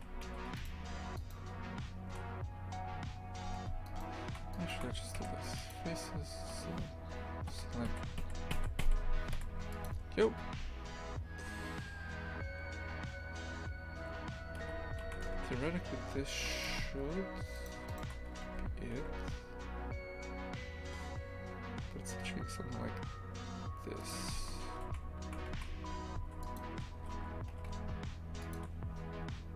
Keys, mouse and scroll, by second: 0.3 a, 0.6 alt+shift+right click, 1.2 alt+shift+right click, 3.5 a, 3.9 alt+shift+right click, 4.5 alt+shift+right click, 5.7 Delete, 8.5 l, 9.8 Delete, 10.4 Tab, 14.7 z, 15.0 shift+f, 16.7 Tab, 17.6 right click, 17.9 shift+right click, 18.3 g, 24.2 shift+f, 27.0 g.